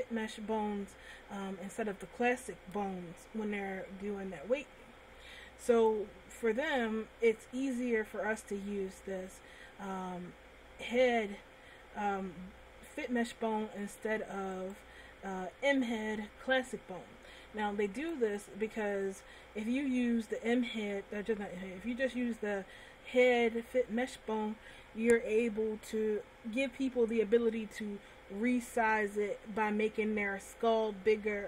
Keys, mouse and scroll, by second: 6.2 right click, 13.8 middle click, 15.0 right click, 18.4 right click.